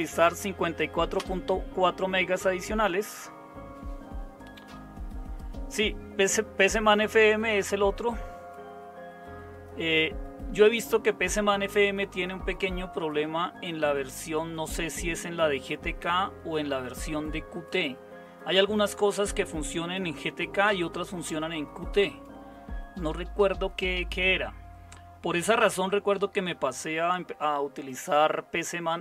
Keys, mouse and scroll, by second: 1.1 Return.